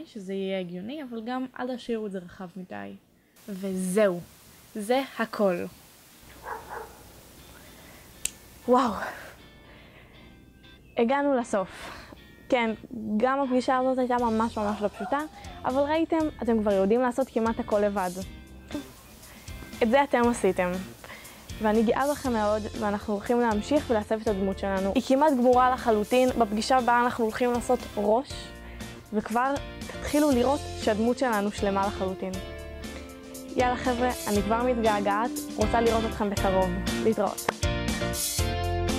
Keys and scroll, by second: 5.5 s.